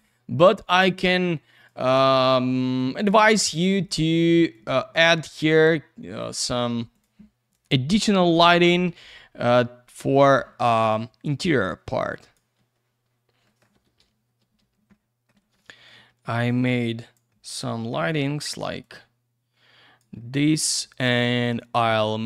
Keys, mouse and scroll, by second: 0.4 click, 0.5 click, 1.5 click, 1.6 click, 2.6 click, 2.7 click, 3.8 click, 3.9 click, 4.5 click, 5.3 click, 5.5 click, 6.2 click, 6.9 click, 7.0 click, 7.5 click, 8.4 Escape, 9.4 click, 9.5 click, 10.1 click, 10.3 click, 10.8 click, 13.4 middle click, 13.6 middle click, 13.7 typing, 14.6 scroll down 1, 14.9 alt+middle click, 15.3 typing, 15.6 alt+middle click, 16.4 click, 17.3 middle click, 18.8 click, 20.2 alt+middle click, 21.4 click, 21.5 click.